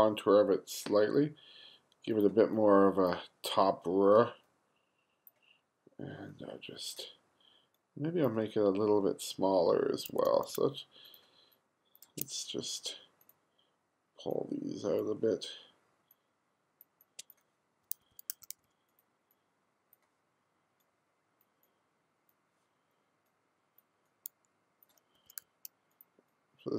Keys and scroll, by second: 10.1 2, 18.1 1, 18.4 2, 25.2 2.